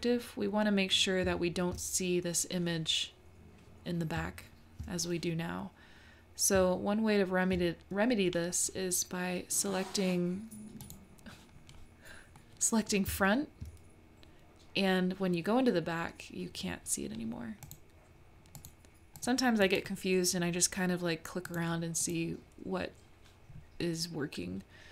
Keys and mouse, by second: 0.0-0.5 middle drag, 1.2 `, 4.2 `, 6.5 `, 10.8 click, 12.4 middle click, 13.2 `, 18.6 click, 19.2 click, 19.6 click, 21.5 click, 22.0 click, 24.0-24.9 middle drag.